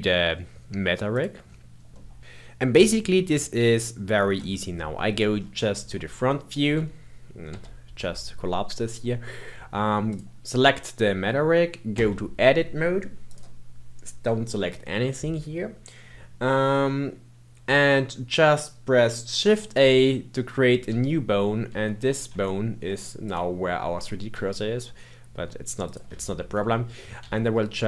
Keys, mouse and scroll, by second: 1.1 click, 1.9 middle click, 3.6 middle click, 4.3 KP_1, 5.3-5.8 scroll up 2, 5.9-7.5 shift+middle drag, 7.5 n, 10.0 click, 11.9 Tab, 13.2 click, 19.3 shift+a, 20.8 g, 22.4 shift+middle click, 23.2 click, 24.3 g, 26.2 shift+middle click, 27.2 r.